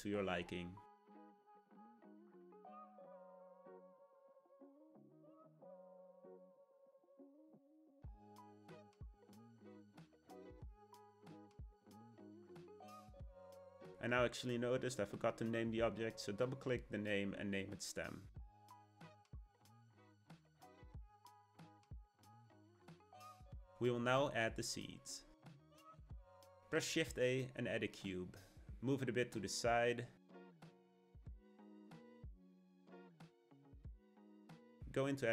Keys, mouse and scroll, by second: 0.8 middle click, 1.5 scroll down 2, 1.7-5.1 middle drag, 5.1 Tab, 5.4 a, 5.8 s, 7.4 Tab, 7.6-9.4 middle drag, 9.4 g, 10.8 click, 11.1-13.8 middle drag, 13.8-14.2 scroll down 2, 14.2-17.4 middle drag, 17.4 click, 17.5-20.7 drag, 20.7 click, 21.5-24.5 middle drag, 26.6 shift+a, 29.8-32.5 middle drag, 32.5 g, 33.8-35.1 shift+middle drag, 35.1 Tab.